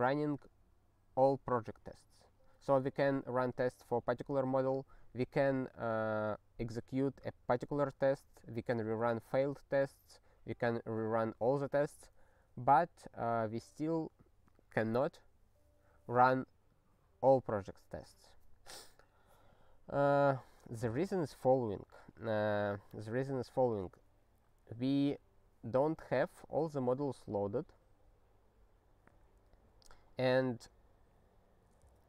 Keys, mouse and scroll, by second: 1.9 scroll up 3, 7.2-7.6 scroll up 1, 12.2 scroll up 3, 12.8-13.4 scroll, 13.4 scroll down 3, 15.1-15.7 scroll down 3.